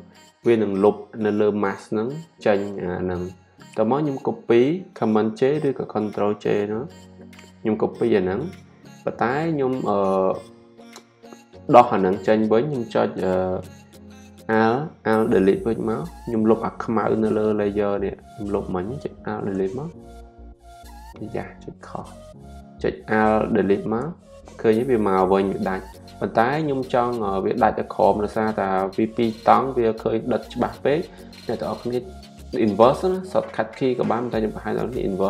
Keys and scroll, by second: 7.1 super+j.